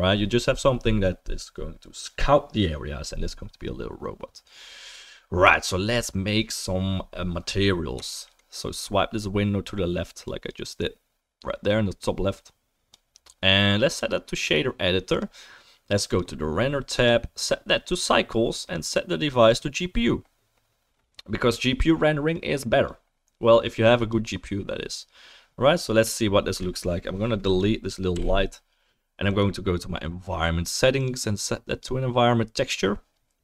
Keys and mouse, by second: 5.9-27.6 middle drag, 12.3-16.2 drag, 12.3-32.9 right drag, 17.0-24.2 drag, 27.4 click, 28.1 Delete, 28.2 Delete, 29.3 click, 29.3 middle click, 31.0-33.4 drag, 31.0-32.9 middle drag.